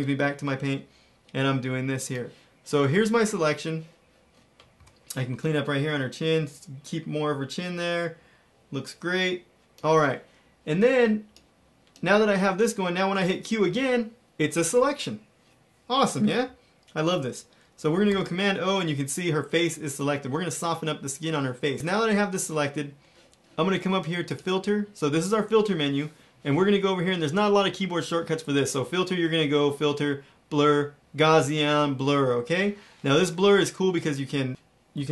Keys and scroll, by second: 4.7 x, 13.6 q, 18.0 super+0.